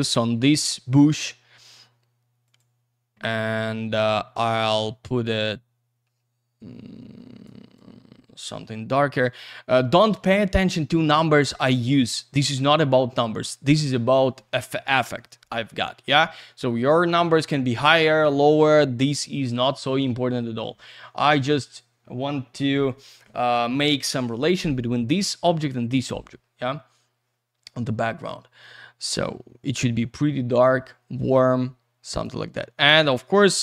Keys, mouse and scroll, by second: 0.0 click, 0.2 double click, 2.4 click, 4.6 click, 5.2 click, 7.7 click, 12.0-13.3 scroll up 1, 15.3-17.1 scroll down 1, 20.3-21.0 scroll up 1, 21.0 middle click, 26.1 scroll down 1, 26.2-26.9 scroll up 1, 28.6 click, 32.1 click, 33.3 click.